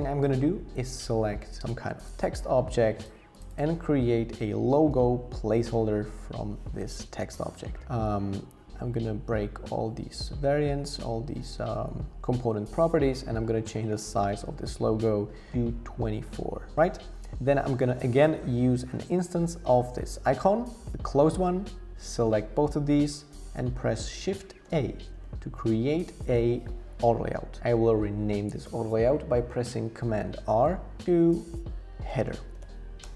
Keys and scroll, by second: 4.3-5.5 typing, 6.0 Escape, 13.8 Up, 14.0 Up, 14.3 Up, 14.4 Up, 14.7 Up, 24.6 shift+a, 30.5 super+r, 31.8-33.1 typing.